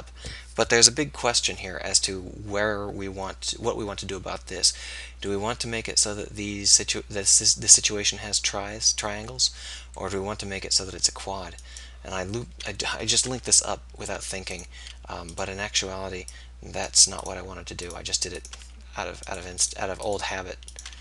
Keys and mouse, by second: 13.4 v, 18.4 right click, 19.0 f.